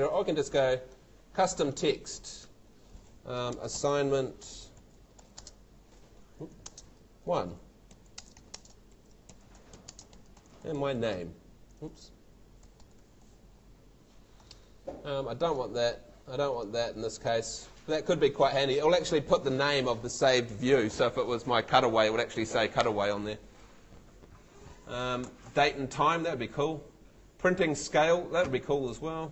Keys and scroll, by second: 3.3-13.3 typing.